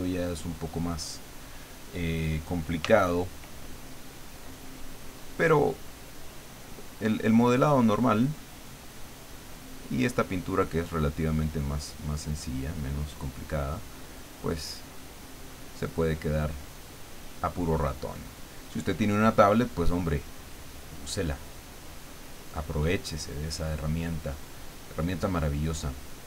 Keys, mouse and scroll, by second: 2.8 f, 4.2 click, 5.7-8.6 drag, 9.3 click, 11.0-14.7 drag, 15.2-18.3 drag, 19.2-22.7 drag, 23.3-26.2 drag.